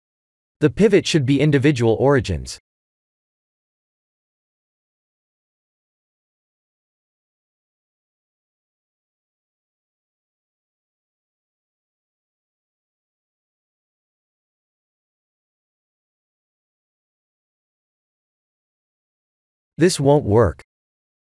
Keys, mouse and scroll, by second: 1.0 click, 4.0 click, 9.3 click, 17.9 ctrl+z, 18.9 i.